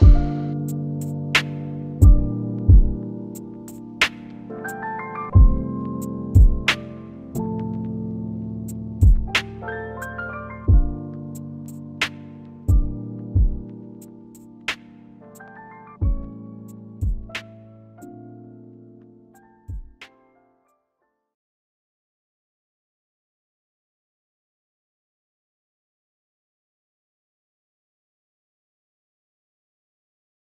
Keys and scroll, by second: 12.1 p, 25.6 F9, 27.5 ctrl+alt+shift+y.